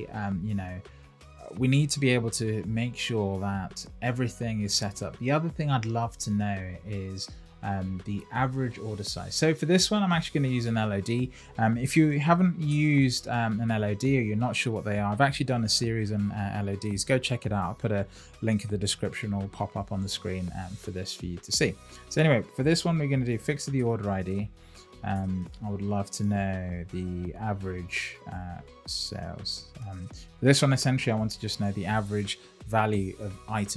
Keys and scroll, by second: 13.6 Return, 24.5 Down, 25.1 Return.